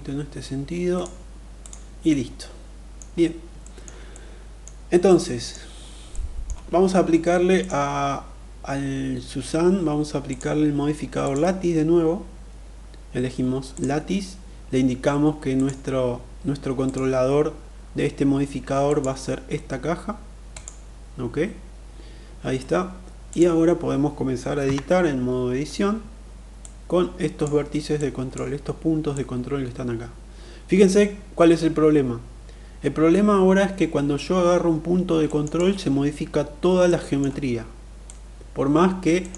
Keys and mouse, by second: 1.2 click, 1.6-2.6 middle drag, 3.2 shift+middle drag, 3.7-4.3 middle drag, 4.6 middle click, 5.7 middle click, 10.6-13.4 drag, 15.0 click, 18.4 click, 24.2 Tab, 26.1 click, 27.4 click, 28.6-34.8 drag, 34.8 middle click, 36.4 middle click, 37.4-38.8 drag, 38.8 middle click, 38.9 click.